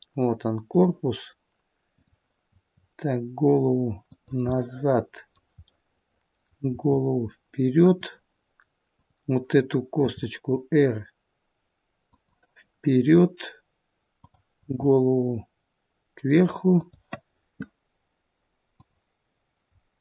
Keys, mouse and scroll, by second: 1.9 click, 2.4 r, 4.4 middle click, 5.6 middle click, 6.7 r, 8.9 click, 10.0 r, 14.1 click, 14.7 r, 18.7 click.